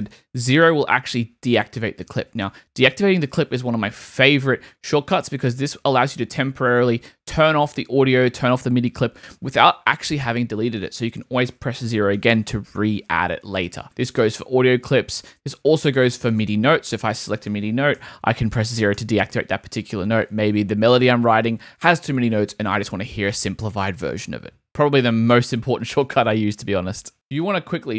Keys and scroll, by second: 0.5 0, 2.2 0, 11.9 0, 18.0 0.